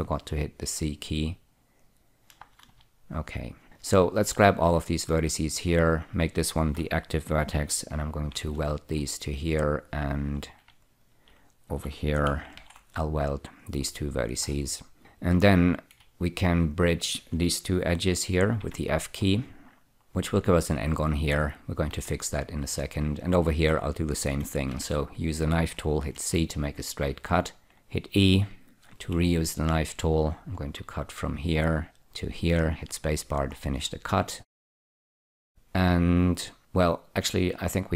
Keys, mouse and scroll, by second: 2.1 click, 2.7 space, 3.0 space, 3.6 click, 4.1 click, 4.8-5.4 scroll up 4, 5.8 shift+click, 6.2 shift+click, 8.6 alt+y, 9.7 click, 11.1 shift+click, 11.3 shift+double click, 12.9 alt+y, 14.5-15.1 scroll down 2, 15.1 2, 15.8 click, 17.0 shift+click, 18.9 f, 19.6-20.8 scroll down 4, 20.8 scroll down 1, 22.3 1, 22.8-24.6 scroll up 2, 25.0 k, 25.6 click, 26.4 c, 27.7 click, 29.3 e, 31.3 click, 32.3 click, 33.1 space, 33.9-35.3 scroll up 1, 35.3 scroll up 2.